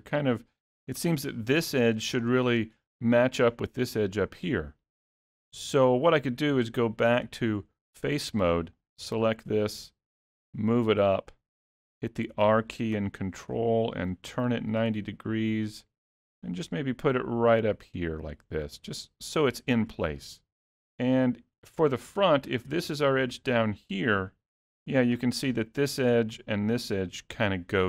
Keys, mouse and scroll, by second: 6.9 click, 8.9 click, 10.3 g, 12.4 r, 16.3 g, 19.6 middle click, 20.9 alt+a, 21.8 middle click, 23.2 click.